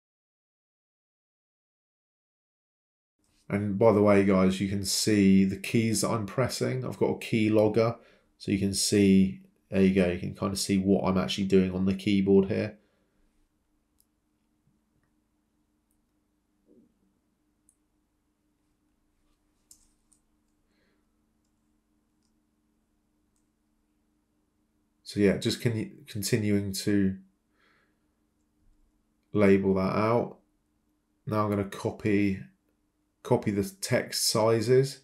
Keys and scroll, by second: 8.9 Delete, 11.6 c, 12.0 Return, 16.0 Escape, 22.0 5, 22.8 Escape, 25.6 c, 26.1 Return, 33.9 ctrl+c, 34.2 ctrl+v.